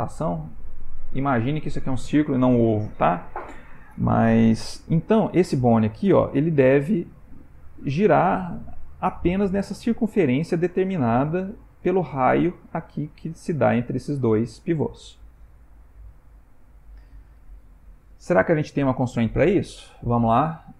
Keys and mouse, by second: 15.8 click, 20.0 click.